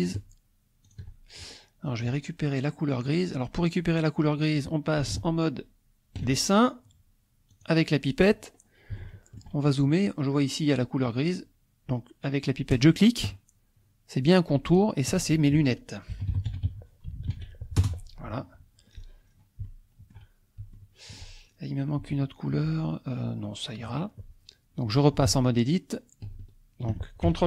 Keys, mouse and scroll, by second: 0.0 shift+click, 0.8 shift+click, 5.2 ctrl+Tab, 7.5 click, 8.5 middle click, 9.1 shift+middle click, 9.4-9.9 shift+scroll up 2, 9.9 scroll up 1, 13.0 click, 14.7 click, 16.1-17.3 typing, 17.8 Return, 18.9-19.7 scroll down 2, 19.7 shift+click, 20.8 shift+click, 21.4 shift+middle click, 22.1 shift+click, 25.3 ctrl+Tab.